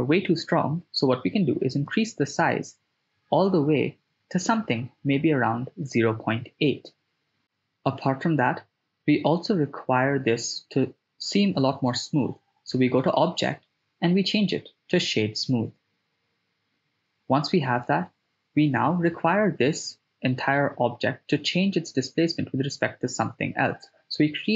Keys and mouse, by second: 0.6-5.7 drag, 6.2 click, 7.3-9.7 middle drag, 13.1-16.1 drag, 16.7 middle click, 18.2 shift+a, 23.5 right click, 23.5 x.